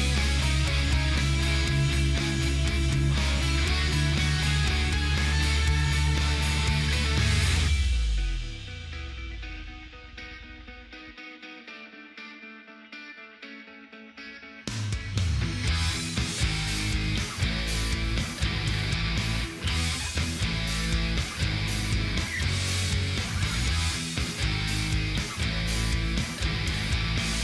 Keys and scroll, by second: 18.3 ctrl+alt+space, 20.4 ctrl+alt+space.